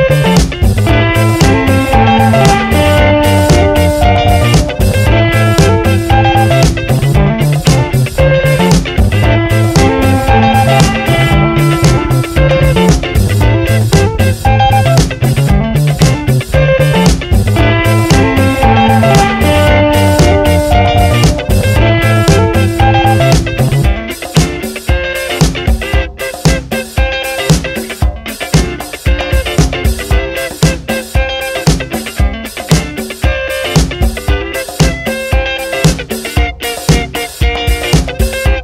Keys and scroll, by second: 8.0 Return, 8.6 v, 8.8 Up, 10.0 Down, 20.8 2, 21.0 Return, 27.9 7, 28.1 Return, 32.7 ctrl+-, 35.0 ctrl+=, 38.2 v.